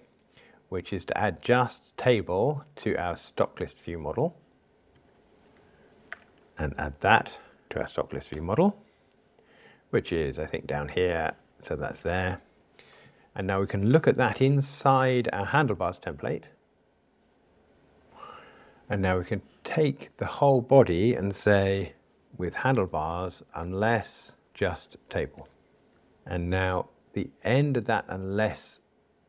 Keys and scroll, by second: 6.5 alt+Return, 26.5 super+x.